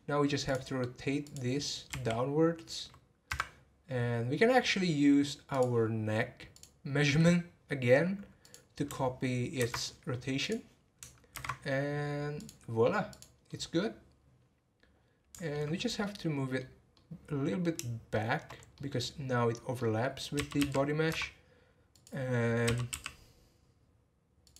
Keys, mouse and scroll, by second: 0.5 click, 1.2 click, 1.9 r, 3.8 scroll up 2, 4.5-5.5 scroll up 9, 5.5 click, 6.5 click, 8.4 click, 9.5 ctrl+c, 10.4 click, 11.3 ctrl+v, 12.3 click, 13.1 click, 13.5-15.7 middle drag, 15.7 scroll up 3, 16.0-18.5 middle drag, 18.5 scroll up 1, 18.7-20.4 middle drag, 20.4 g, 21.9 click.